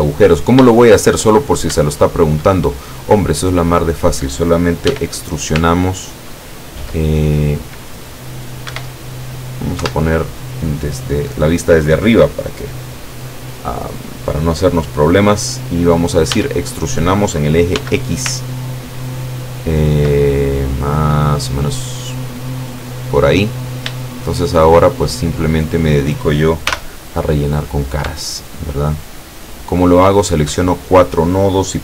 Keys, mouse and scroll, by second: 0.4-1.4 scroll up 2, 0.8 shift+middle click, 1.9 shift+middle click, 2.0 shift+scroll up 1, 3.7 right click, 4.9 e, 8.8 Escape, 9.9 KP_7, 16.4 e, 17.8 x, 18.3 ctrl+x, 23.0 click, 24.4 shift+right click, 24.9 shift+right click, 25.7 shift+right click, 26.7 shift+f, 27.9 shift+right click, 28.5 shift+right click, 28.9 shift+right click, 29.7 shift+right click.